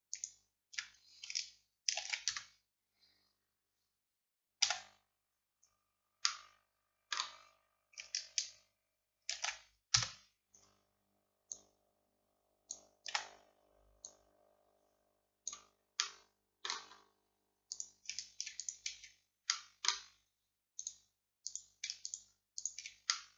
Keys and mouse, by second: 0.2-1.9 right drag, 2.1 shift+d, 4.7 f, 6.3-8.0 drag, 9.4 shift+d, 11.6-13.2 drag, 13.2 z, 14.1-17.8 drag, 17.8-20.9 middle drag, 20.9 click, 21.5-23.3 middle drag.